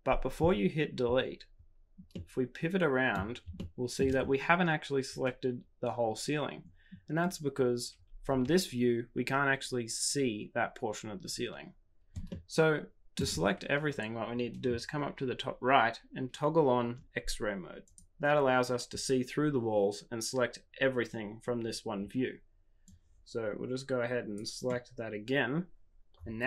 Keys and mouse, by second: 2.2 middle click, 3.5 shift+middle click, 8.3 KP_1, 12.3 shift+middle click, 17.9 click, 22.9-25.9 drag.